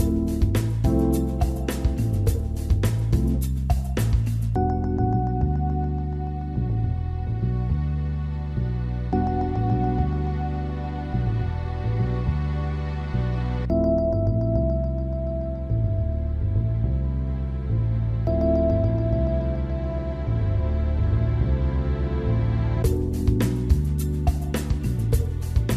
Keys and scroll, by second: 9.6 ctrl+b, 9.6 x.